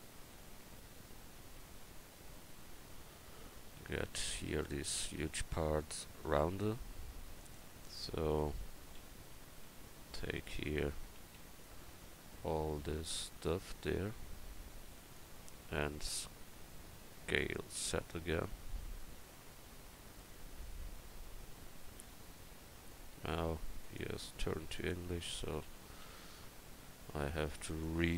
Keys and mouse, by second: 1.6-2.8 right drag, 2.8 Tab, 3.3 Tab, 3.8 a, 9.0 a, 9.4 c, 10.7 a, 11.2 c, 17.4 s, 25.6 d, 26.0 z.